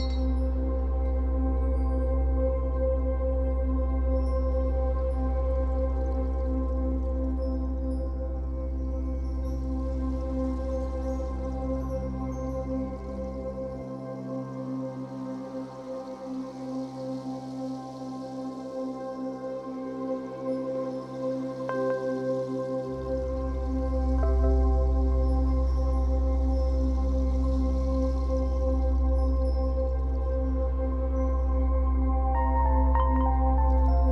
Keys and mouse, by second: 0.8 click, 0.8 typing, 2.0 click, 4.7 click, 6.5 click, 7.6 click, 7.8 click, 8.8 click, 10.2 click, 11.3 click, 13.2-19.1 drag, 20.7 click, 23.0 click, 23.8 click, 23.9 click, 24.6 click, 30.2 click, 32.7 click.